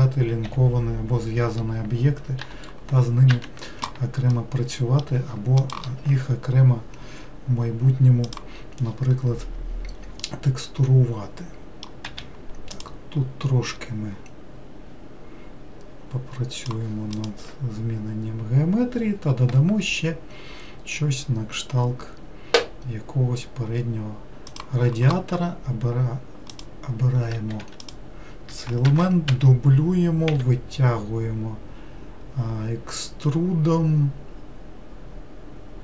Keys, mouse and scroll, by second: 0.5 l, 2.4 g, 4.3-7.5 middle drag, 10.2-12.1 middle drag, 12.1 2, 12.8 click, 13.9 click, 26.5 click, 27.6 3, 27.8 click, 28.9 shift+d, 30.3 e.